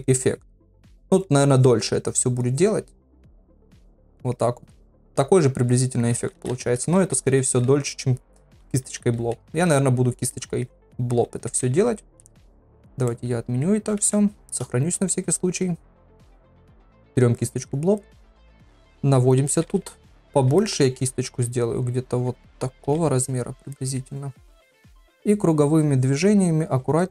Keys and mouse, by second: 0.2 click, 0.6 click, 1.1 click, 1.6 click, 2.0 click, 2.5 click, 2.9 click, 3.3 click, 3.6 click, 4.0 click, 4.4-6.1 middle drag, 6.2 ctrl+z, 6.4 ctrl+z, 7.3 ctrl+z, 7.5 ctrl+z, 7.7 ctrl+z, 8.6 ctrl+z, 8.9 ctrl+z, 9.2 ctrl+z, 10.3 middle click, 10.8 ctrl+z, 11.1 ctrl+z, 11.5 ctrl+z, 12.2 ctrl+z, 12.7 ctrl+z, 13.1 middle click, 14.3 ctrl+s, 16.8 click, 17.4 middle click, 18.0 ctrl+middle click, 18.5 middle click, 19.4-20.4 ], 20.6 middle click, 22.8 ], 23.7 middle click, 24.7-26.4 drag, 26.6 click.